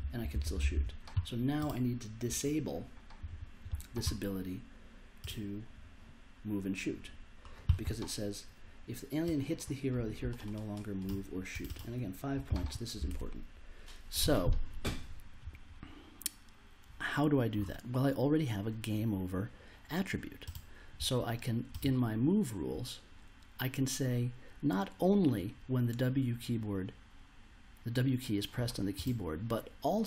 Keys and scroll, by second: 0.0-0.8 typing, 13.1 super+Tab.